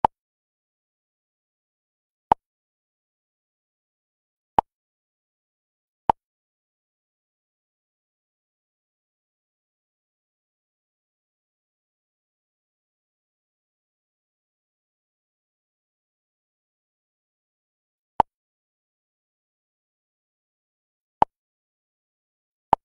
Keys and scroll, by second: 10.5 Up, 14.3 Down, 15.5 Left.